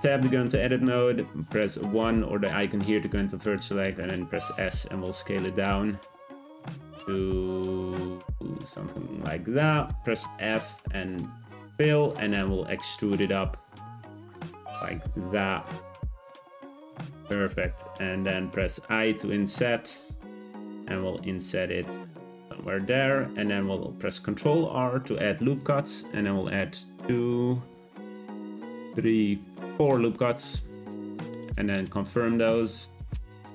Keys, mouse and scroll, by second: 2.8-3.8 drag, 3.8 s, 9.6 middle click, 10.2 f, 11.0 shift+middle click, 11.5-12.8 scroll up 2, 12.8 e, 18.8 i, 23.1 r, 33.2 3.